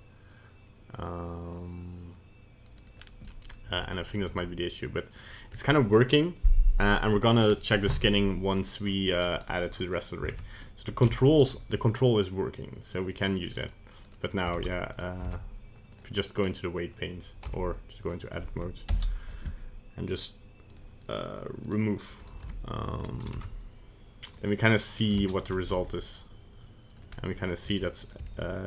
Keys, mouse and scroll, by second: 3.0 scroll down 2, 3.3 middle click, 4.4 g, 5.5-6.4 scroll up 1, 8.6 scroll up 1, 8.8 middle click, 8.9 middle click, 10.3 ctrl+Tab, 11.3 ctrl+Tab, 11.3 right click, 11.6 g, 14.1 right click, 14.6 ctrl+Tab, 15.0 right click, 15.3 ctrl+Tab, 16.4 scroll down 1, 17.6 Tab, 18.9 ctrl+l, 20.1 click, 20.7 click, 21.7 click, 22.6 Tab, 23.0 scroll up 1, 23.3 ctrl+Tab, 24.8 right click, 25.2 ctrl+Tab, 25.4 right click, 25.7 g, 27.2 middle click, 27.7 g, 28.3 r.